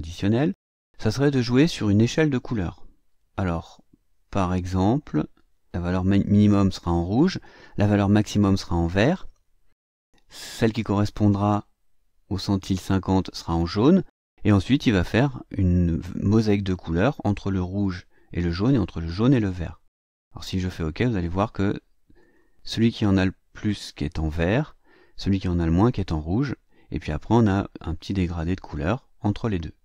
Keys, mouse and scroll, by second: 2.4 click, 4.3-5.6 drag, 21.2 click, 22.2 click, 23.1 click, 24.3 click, 25.4 click.